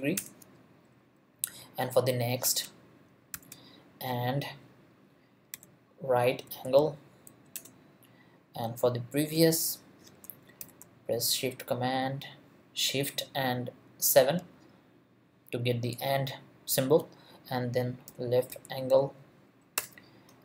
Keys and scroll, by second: 0.2 Return, 3.3 shift+7, 5.5 r, 6.4 a, 6.8 n, 7.5 Return, 10.6 shift+7, 17.8-19.4 typing, 19.8 Return.